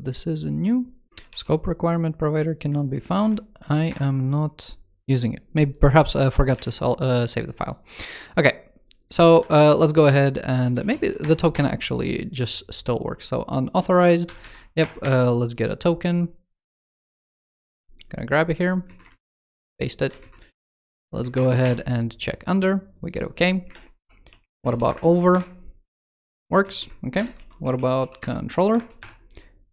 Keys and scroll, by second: 1.1 super+s, 2.6 super+2, 6.3 super+2, 10.9 super+Return, 14.6 super+Return, 16.7 shift+super+Right, 17.4 super+c, 18.8 shift+super+Right, 19.1 super+v, 19.4 super+s, 19.9 super+Left, 21.1 super+Return, 23.5 alt+BackSpace, 24.6 super+Return, 26.4 alt+Left, 26.9 alt+BackSpace, 28.4 super+Return, 29.5 super+Right.